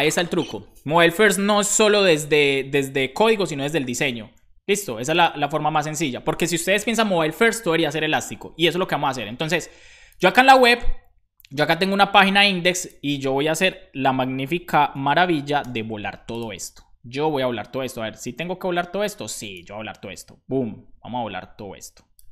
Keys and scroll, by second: 14.8 super+b, 15.6 super+j.